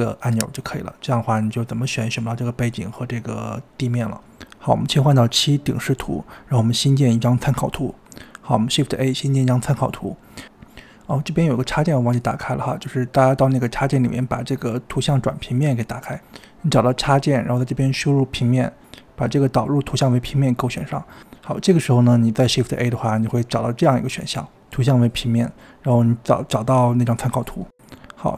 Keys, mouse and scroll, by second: 0.0 scroll down 1, 0.1 click, 1.1 click, 1.3 click, 1.8-2.7 middle drag, 2.7-4.0 scroll down 2, 4.0-5.4 scroll down 6, 4.5 middle click, 4.7 KP_7, 5.0 shift+middle click, 5.4 click, 5.7 scroll up 2, 5.8-6.6 scroll down 2, 6.0 middle drag, 6.7 click, 7.0-7.4 scroll down 2, 7.3 click, 7.4 middle click, 7.5 KP_7, 8.6 shift+a, 11.8-15.0 drag, 23.5 shift+a.